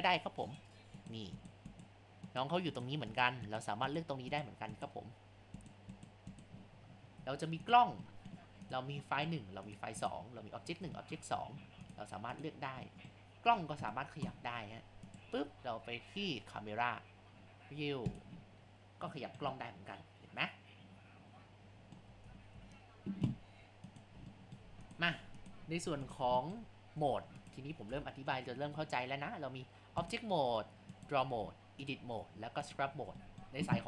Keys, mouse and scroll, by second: 14.1 KP_0, 15.1 click, 18.7-19.1 scroll.